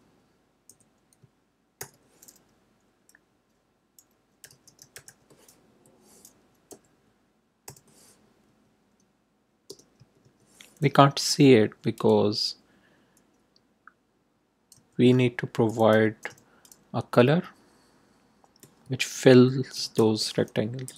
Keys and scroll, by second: 0.6 Left, 1.7 shift+', 4.1-5.5 typing, 5.6 Right, 6.6 ,, 7.6 0, 8.4 Right, 9.6 Return, 9.9 Tab, 11.9 ., 14.7-16.8 typing, 19.5-20.4 typing, 20.8 Left.